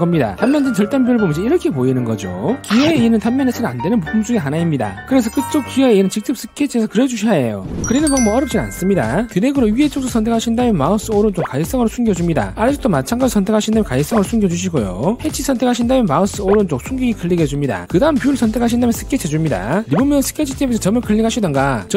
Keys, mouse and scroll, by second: 0.6 click, 2.2 click, 3.0 middle click, 10.1 click, 11.5 right click, 12.5 click, 12.8 click, 14.2 right click, 15.1 click, 16.0 click, 16.6 right click, 17.8 click, 19.4 click.